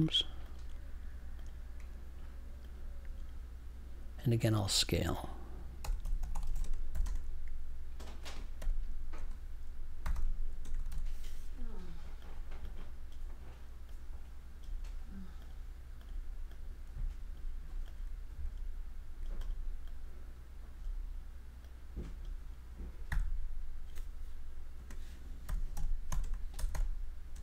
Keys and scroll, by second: 5.8-7.0 typing, 8.5-11.3 typing, 23.0 3, 24.7-27.3 typing.